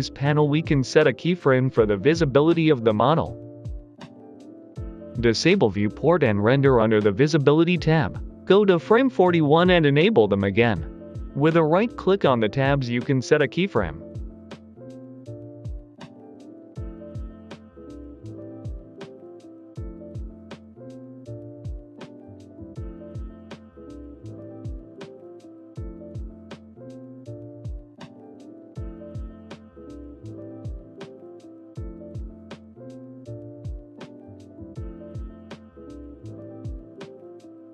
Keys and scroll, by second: 14.6 Left, 14.9 Right, 15.2 Left, 15.4 Right, 15.7 Left, 15.9 Right, 16.2 Left, 16.4 Left, 16.7 Right, 17.0 Right, 22.2 g, 22.3 x, 26.7 g, 26.7 x, 28.0 g, 28.1 x, 30.2 typing.